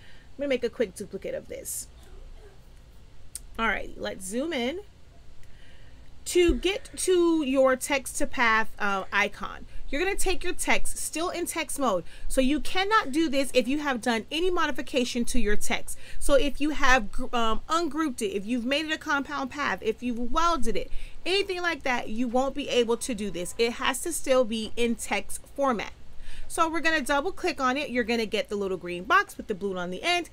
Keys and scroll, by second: 3.5 z.